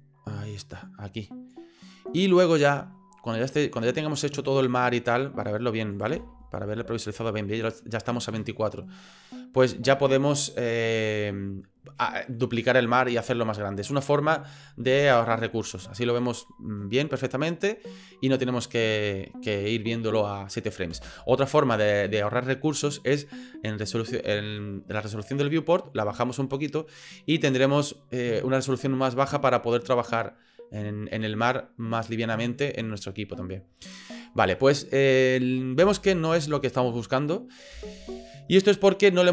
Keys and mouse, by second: 3.1 middle click, 5.9 click, 6.1 space, 20.9 space, 35.8 space, 37.7 space.